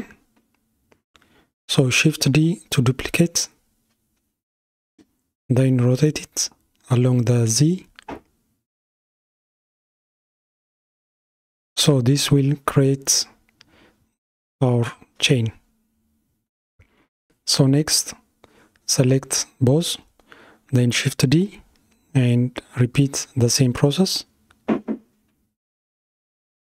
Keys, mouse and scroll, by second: 0.9 shift+d, 11.2 r, 16.1-17.0 scroll down 4, 17.0-18.3 shift+middle drag, 18.3 click, 21.4 shift+d.